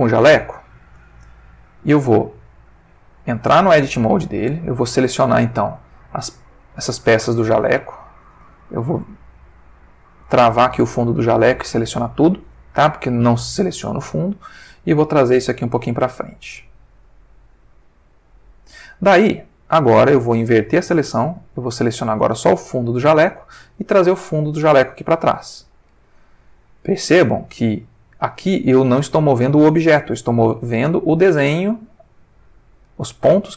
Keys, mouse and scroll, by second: 0.5 ctrl+middle click, 1.3 ctrl+Tab, 2.3 Tab, 2.8 click, 3.5 Tab, 4.9 middle click, 6.5 click, 6.9-8.4 drag, 7.8 Escape, 10.2 click, 12.0 a, 13.9 middle click, 15.4-18.4 drag, 20.6-21.3 drag, 21.4 click, 22.1 a, 22.5-23.6 middle drag, 24.2-26.1 drag, 26.2-27.3 middle drag, 27.5 ctrl+middle click, 28.5 ctrl+middle click, 30.3 middle click, 31.3-33.1 drag, 33.2-33.5 middle drag.